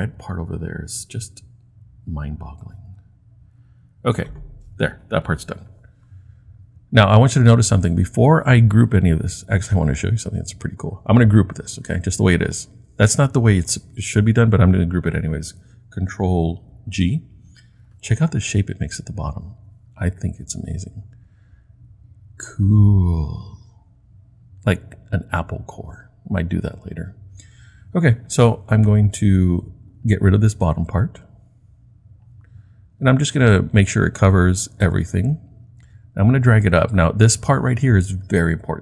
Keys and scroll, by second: 16.9 super+g.